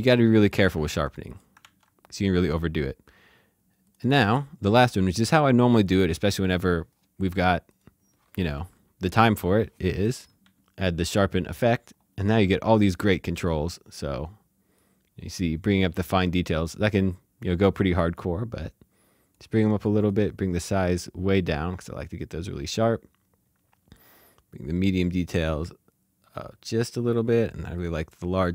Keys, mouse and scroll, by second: 0.3 click, 0.8 d, 1.1 click, 1.6 d, 3.8 click, 5.7 click, 7.7 click, 9.3-10.5 typing, 11.0 click, 14.7 click, 24.2 click.